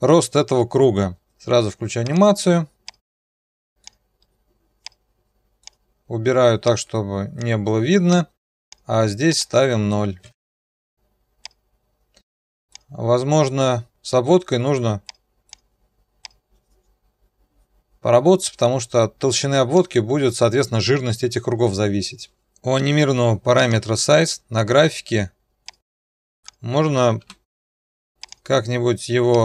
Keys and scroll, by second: 10.1 0, 10.2 Return, 24.1 F1, 27.2 F9.